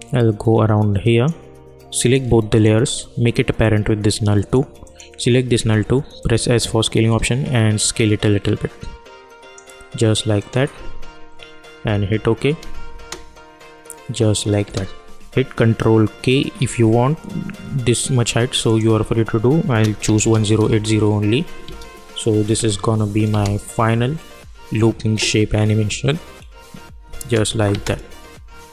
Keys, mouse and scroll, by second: 3.6 click, 5.6 s, 6.2-10.3 drag, 12.9 space, 18.6 click, 20.6 Return, 21.6 space, 27.1 space.